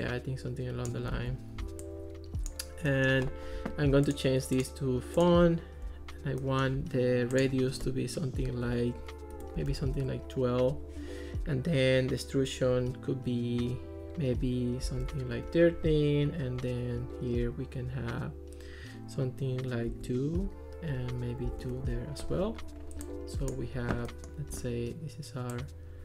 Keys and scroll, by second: 1.2 super+z, 8.7 8, 9.4 BackSpace, 9.6 1, 10.0 Return, 14.6-15.6 typing, 19.9 2, 21.5 2, 21.6 Return.